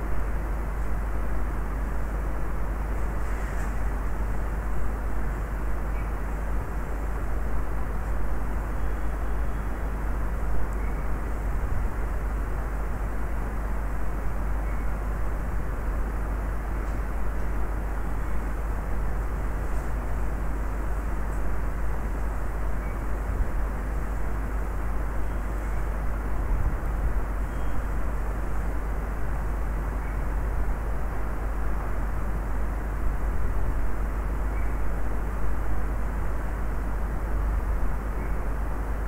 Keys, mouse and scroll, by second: 0.0 click, 4.0-25.6 drag, 26.6 click, 29.3-39.0 drag.